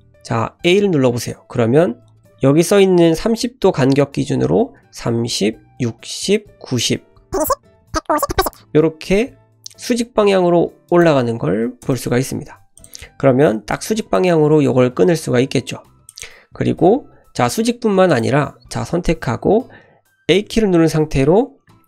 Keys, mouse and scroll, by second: 12.8 click, 13.7 click, 16.1 click, 16.9 k.